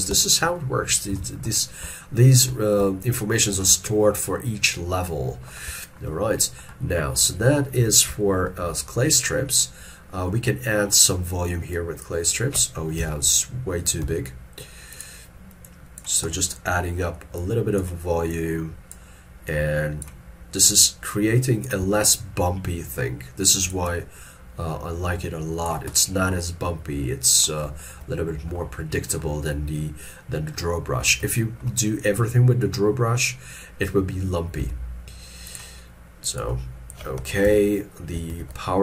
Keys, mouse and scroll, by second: 0.6 shift+middle click, 1.2 shift+middle click, 1.9 ctrl+middle click, 3.1 shift+click, 4.0 scroll down 1, 5.9 shift+middle click, 6.2 shift+middle click, 9.1-10.3 scroll up 1, 13.1 ctrl+z, 14.1 f, 16.4 middle click, 22.2 shift+click, 23.9 shift+click, 26.2 middle click, 27.9 shift+middle click, 28.2 shift+middle click, 31.5 shift+middle click, 33.2-34.4 scroll up 1, 37.5 ctrl+z, 38.4 shift+f.